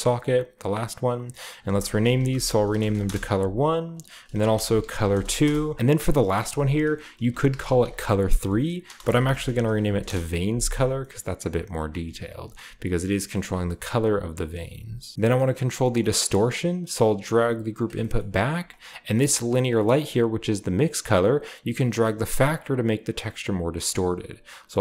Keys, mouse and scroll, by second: 0.2-1.3 drag, 1.4 click, 1.5-3.6 drag, 2.1-3.0 typing, 3.9 middle click, 4.0 click, 4.0 middle click, 4.1 click, 4.4-10.5 typing, 5.9-7.4 drag, 11.4-13.2 drag, 14.3 click, 14.9-15.6 typing, 15.1-15.7 scroll down 1, 15.7 middle drag, 15.8-17.7 drag, 16.5-17.7 scroll down 1, 16.7 g, 17.7 middle click, 17.8 click, 17.8-18.1 scroll down 1, 18.0-24.8 middle drag, 18.0 typing, 18.1-20.4 scroll up 1, 18.4-19.2 drag, 19.3-20.4 drag, 23.4 click, 23.4-24.8 right drag.